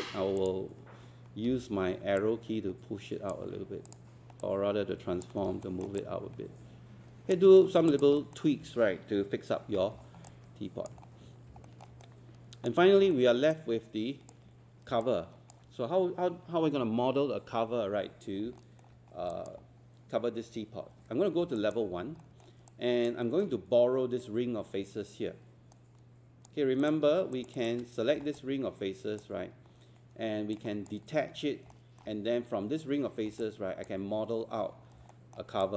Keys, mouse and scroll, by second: 0.4-1.4 drag, 1.6 w, 2.2-3.4 drag, 5.5 alt+scroll down 1, 7.6 alt+middle click, 7.9 alt+click, 8.2 alt+middle click, 10.1 alt+scroll down 1, 11.1-11.5 scroll up 1, 11.7 alt+middle click, 12.0 right click, 13.1 alt+middle click, 13.5 alt+click, 15.0 alt+click, 18.1-18.5 scroll up 1, 18.6 alt+middle click, 19.0 scroll up 1, 19.3 alt+click, 19.7-20.3 scroll up 1, 20.9 1, 21.6 alt+click, 21.9 scroll up 1, 22.2 alt+middle click, 22.7 alt+click, 23.3 alt+middle click, 25.7 right click, 26.8 click, 27.3 shift+click, 28.2 alt+scroll down 1, 30.5 click, 31.7 alt+middle click, 33.2 scroll down 1, 33.4 alt+click, 35.1 alt+middle click, 35.6 alt+click.